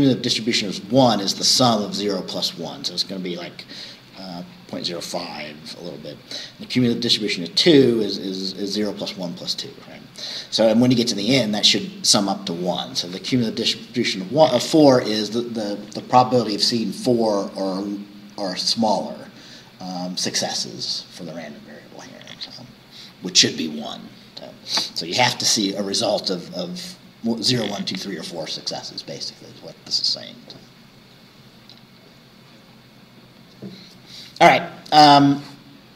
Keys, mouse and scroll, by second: 4.2-4.9 scroll down 4, 7.0 scroll up 2, 11.2-11.5 scroll down 2, 32.7-33.1 scroll down 2.